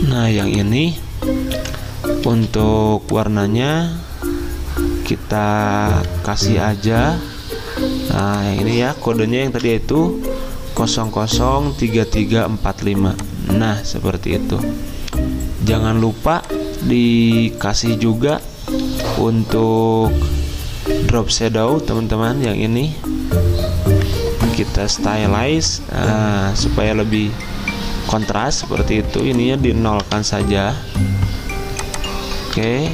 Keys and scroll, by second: 1.6 t, 2.3 ctrl+z, 6.4 F6, 9.5 ctrl+v, 18.8 ctrl+z, 30.1 0, 32.6 0.